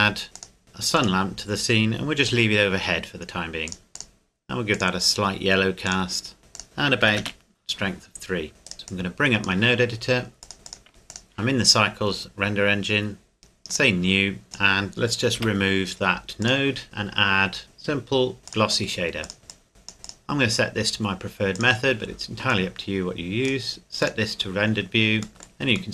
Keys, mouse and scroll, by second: 0.4 click, 1.4 scroll up 1, 1.5 scroll down 1, 2.3 g, 3.7 click, 7.0 KP_3, 7.2 KP_Enter, 8.2-8.6 scroll up 1, 8.6 right click, 8.9 click, 10.9 n, 11.1 click, 13.7 click, 14.4-15.4 scroll up 1, 15.4 Delete, 16.4 click, 18.4 click, 25.3 middle click.